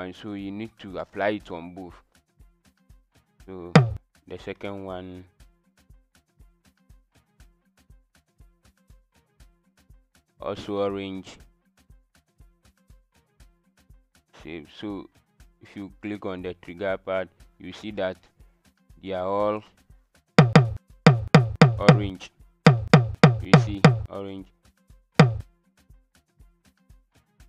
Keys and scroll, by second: 21.1-23.7 typing.